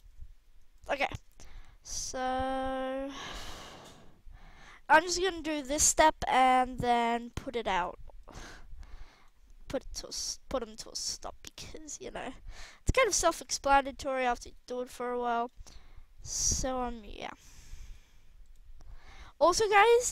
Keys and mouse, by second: 1.2 KP_1, 6.0 KP_3, 10.0 g, 11.3 r, 11.9 g, 13.4-13.9 right drag, 13.7 r, 14.3-14.9 right drag, 14.3 g, 16.6 r, 19.1 r.